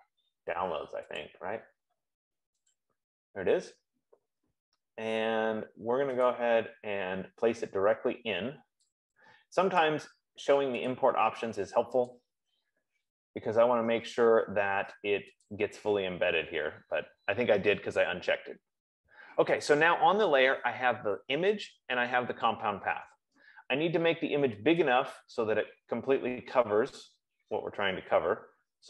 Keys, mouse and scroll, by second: 1.7 click, 3.0 click, 6.7 click, 10.2 click, 11.4 click, 12.5 click, 15.9 click.